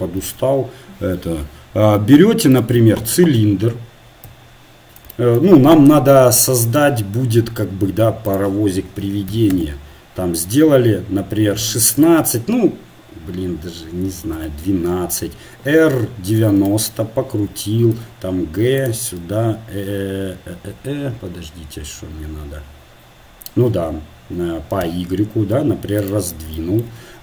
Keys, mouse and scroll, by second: 0.2-2.6 drag, 2.6 shift+a, 3.6 KP_1, 4.7 KP_3, 9.5-14.7 drag, 15.9 r, 17.9 g, 19.3 s.